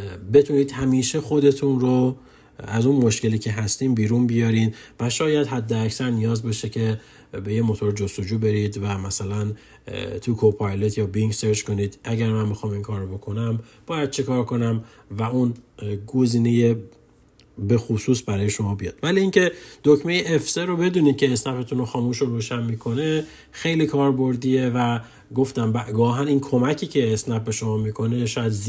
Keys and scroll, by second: 20.0 F3.